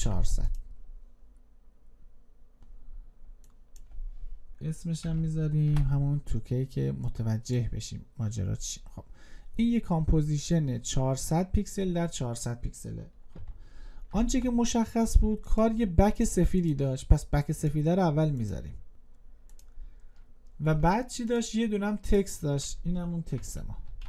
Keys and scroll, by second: 13.8 ctrl+y, 23.7 ctrl+a.